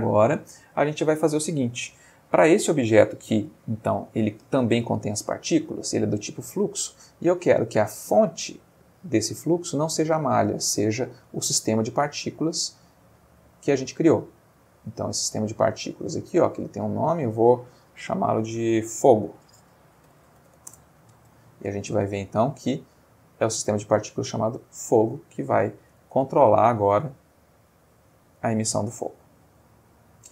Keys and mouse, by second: 0.5 click, 2.8 g, 3.6 Escape, 6.8-7.8 middle drag, 10.3 click, 11.2 click, 12.4 click, 13.3 click, 15.1 click, 15.7 middle click, 16.8 click, 18.0 click, 18.7 click, 20.1 shift+f, 20.2 shift+o, 20.4 shift+g, 20.5 shift+o, 20.7 shift+Return, 22.1 click, 22.8 middle click, 25.2-25.8 ctrl+middle drag, 26.0 ctrl+space.